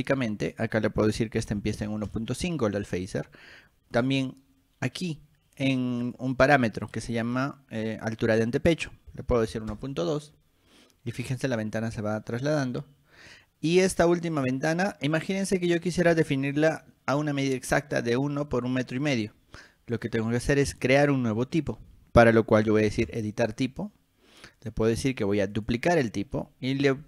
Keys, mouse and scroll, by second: 0.7 click, 3.3 click, 4.1 click, 6.2 click, 12.0 click, 12.7 click, 20.3 middle click, 23.2 click, 25.7 click.